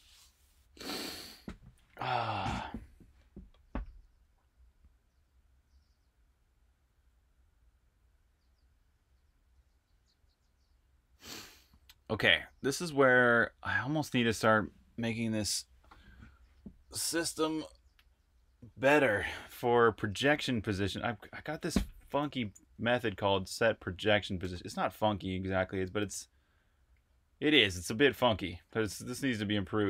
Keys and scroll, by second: 22.4-25.3 typing.